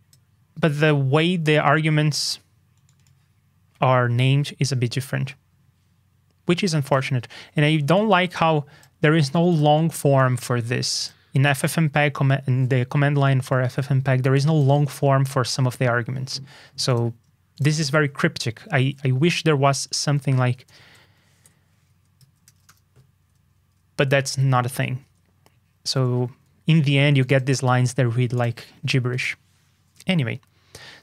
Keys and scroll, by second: 18.7 super+b, 24.3 super+z.